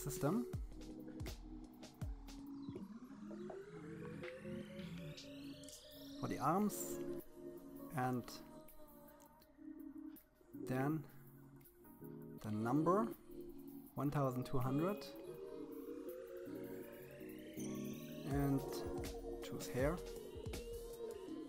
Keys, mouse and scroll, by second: 1.5 click, 4.1 Down, 4.7 BackSpace, 9.6-11.1 drag, 11.4 BackSpace, 12.4 0, 19.8 click.